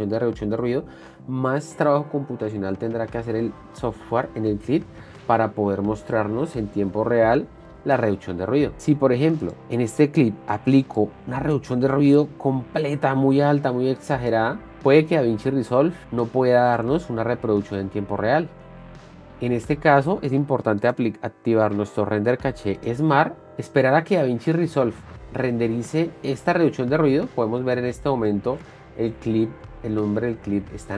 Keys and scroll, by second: 17.2 space, 19.0 space.